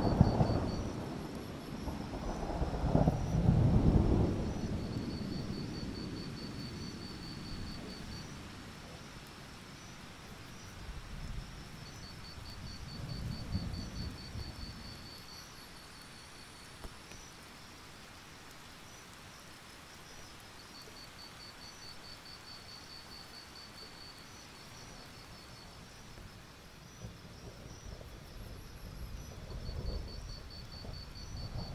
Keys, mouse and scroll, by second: 1.0-1.7 scroll up 1, 1.7 click, 2.9 ctrl+z, 3.4 alt+click, 3.5 alt+scroll up 1, 3.7 click, 4.1 alt+scroll up 1, 4.4 click, 6.7-7.0 alt+scroll down 1, 7.1-7.7 alt+scroll up 3, 8.1 alt+scroll down 1, 9.5 click, 12.1 scroll up 1, 12.3-12.9 alt+scroll down 1, 13.0 alt+scroll up 1, 13.4 click, 14.3 shift+click, 15.0 click, 16.0-16.5 scroll up 1, 16.5 click, 18.0-19.6 scroll up 1, 20.1-22.4 drag, 22.4 alt+scroll up 1, 23.2 click, 27.3 Delete, 27.5-31.7 drag.